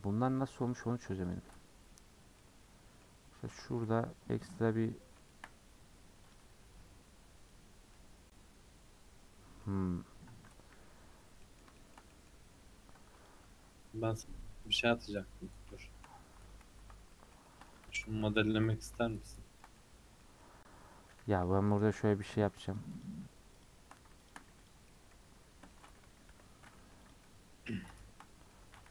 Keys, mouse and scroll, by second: 2.4 middle click, 3.1-3.6 scroll up 2, 3.6 shift+middle click, 3.9 g, 4.7 scroll down 2, 4.9 middle click, 5.5 scroll up 1, 6.3 click, 6.5 g, 7.9-10.4 middle drag, 10.4 a, 11.1 scroll down 1, 11.4-12.5 middle drag, 12.5-13.2 scroll up 3, 13.2 click, 14.6 g, 15.3-15.8 scroll down 1, 15.8 shift+middle click, 16.1 scroll up 1, 16.6 ctrl+z, 17.1 middle click, 17.9 ctrl+z, 18.2 ctrl+z, 18.7-21.2 middle drag, 21.2 3, 21.8 alt+click, 22.7 shift+click, 23.0 shift+click, 23.6 shift+click, 24.3 shift+click, 24.7 x, 24.9-26.3 middle drag, 26.3 l, 27.1 x, 27.2-28.9 middle drag.